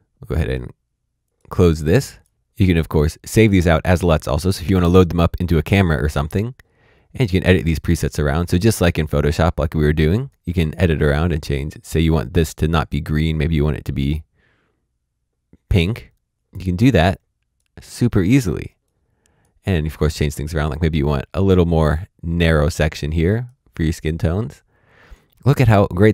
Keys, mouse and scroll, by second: 7.2 click, 9.0 click, 18.8 click, 20.9 click.